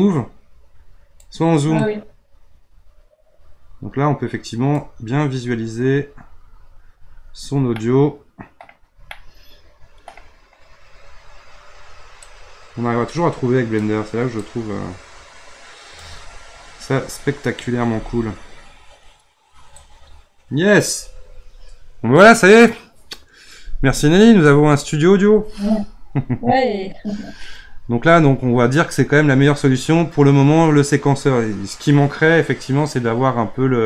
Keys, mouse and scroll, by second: 5.4-7.7 scroll up 17, 7.7-12.2 middle drag, 12.2-16.6 drag, 16.6-17.1 scroll up 2, 17.1-19.7 scroll down 2, 19.7 click.